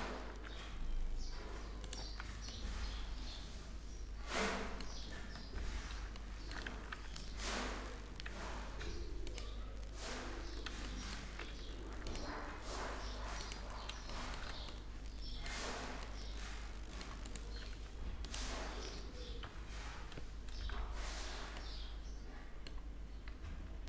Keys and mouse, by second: 1.7 Tab, 6.0 middle click, 6.4 a, 6.6 a, 7.9 w, 10.5 middle click, 11.3 ctrl+r, 11.4 middle click, 13.4 drag, 13.4 middle click, 15.4 Tab, 16.9-17.6 drag, 17.6 right click, 18.8-19.6 drag, 19.0 t, 19.6-21.2 middle drag, 22.2 click, 22.9 F12.